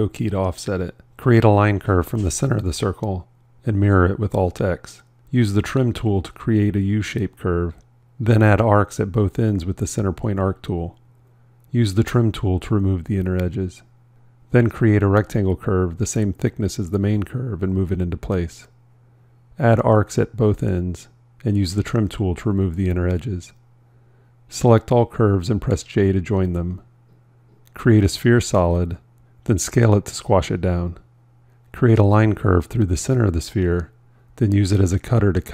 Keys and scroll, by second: 3.6 alt+x, 25.7 j, 35.2 c.